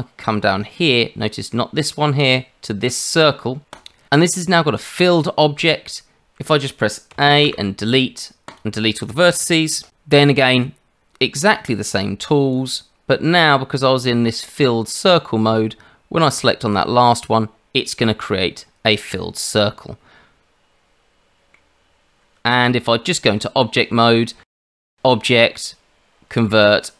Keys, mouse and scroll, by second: 7.1 a, 7.4 Delete, 10.6 click, 11.6 click, 13.4 click, 16.7 click, 19.6 middle click, 22.6 Tab, 24.7 click.